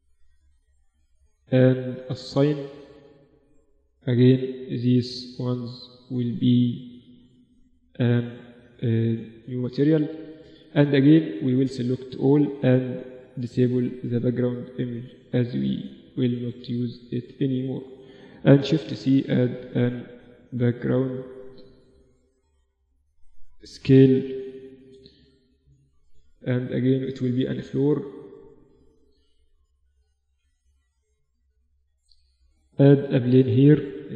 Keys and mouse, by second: 0.6 Tab, 1.7-3.7 drag, 2.4 Tab, 3.0 Tab, 3.7-6.5 right drag, 6.6-7.6 drag, 7.6 Tab, 7.9-8.9 drag, 8.8 ctrl+s, 10.7 a, 10.9 a, 11.8 n, 12.8-16.5 drag, 15.1 n, 16.1 Escape, 16.5 a, 16.6 click, 18.1 shift+c, 18.5 shift+a, 21.1-23.0 drag, 23.1 s, 26.5-28.4 drag, 28.1 KP_3, 29.4-31.0 drag, 30.1 s, 31.6 shift+a, 32.7-34.1 drag, 33.5 r.